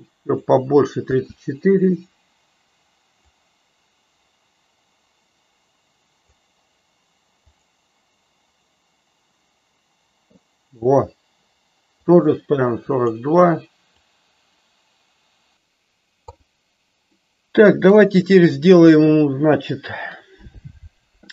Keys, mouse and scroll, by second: 1.1 space, 3.3-6.5 drag, 7.7 click, 12.0-13.2 drag, 14.0-15.5 drag, 17.2 middle click.